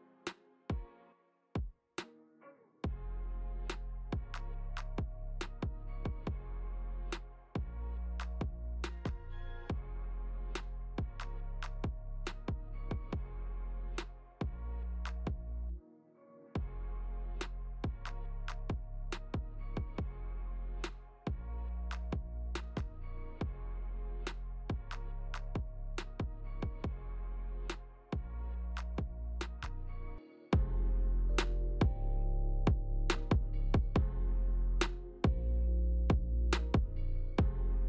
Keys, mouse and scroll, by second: 0.2 Left, 1.4 g, 6.9 g, 13.3 i, 16.9 click, 19.8 click, 26.7 click, 31.7 space, 32.9 scroll down 2, 34.0-34.3 scroll down 1, 34.0 space, 35.2 click, 36.1 click.